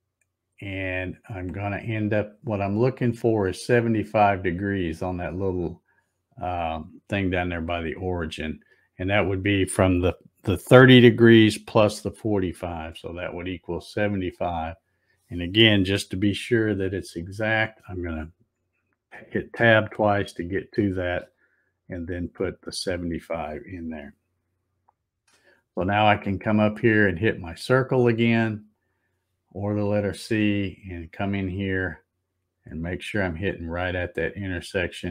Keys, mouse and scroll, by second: 16.5 Tab, 17.1 Tab, 28.8 click, 30.4 scroll up 1, 30.6 scroll down 2, 30.8-31.6 scroll up 9, 34.3-35.1 drag.